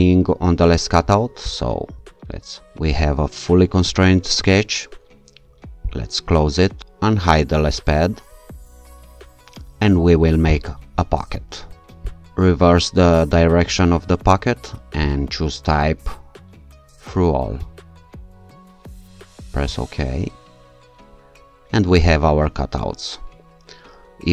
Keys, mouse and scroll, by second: 1.5 shift+click, 2.8-4.2 scroll down 1, 5.9 click, 7.8 click, 10.5 click, 12.1 click, 15.1 click, 17.6 click, 19.7 click.